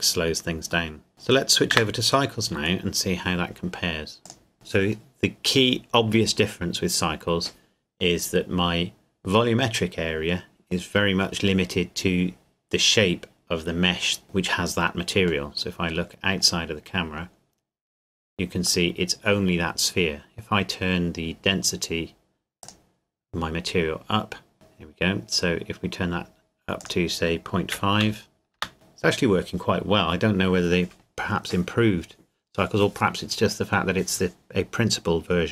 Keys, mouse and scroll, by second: 0.6 middle click, 0.9 middle click, 1.8 KP_0, 4.2 click, 15.5 middle click, 18.1-18.9 scroll down 1, 18.9 middle click, 22.6 click, 24.5-25.3 scroll down 1, 26.8 click, 27.7 KP_Decimal, 28.0 KP_5, 28.6 KP_Enter, 28.9 middle click.